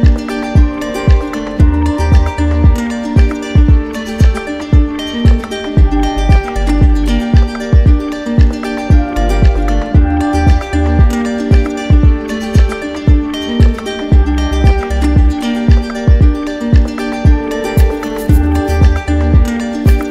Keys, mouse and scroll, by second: 0.1-3.1 drag, 3.6-5.8 drag, 7.1 alt+click, 9.2 w, 15.1 shift+click, 16.1 click, 16.6 shift+click, 17.4 click, 18.0 alt+click.